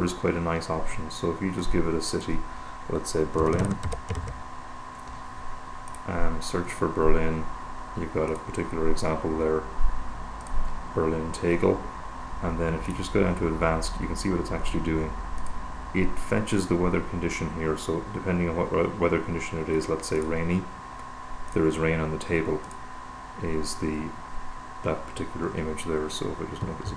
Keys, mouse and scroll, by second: 1.9-2.9 drag, 3.3-4.8 typing, 5.6-6.8 drag, 8.6 click, 10.8 click, 13.1 click, 15.6 click, 20.4 click, 21.8 click, 22.9 click, 26.3 super+=.